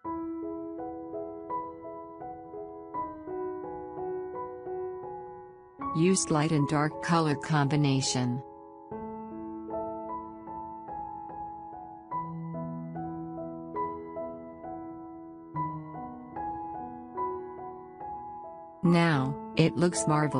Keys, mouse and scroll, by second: 19.0 click.